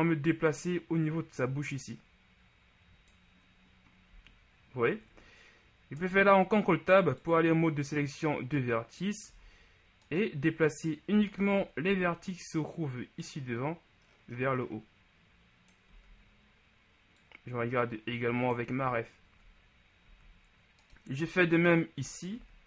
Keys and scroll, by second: 4.2 z, 6.0 ctrl+Tab, 9.5 z, 11.9 shift+z, 16.0 z, 20.1 ctrl+z, 22.4 shift+z.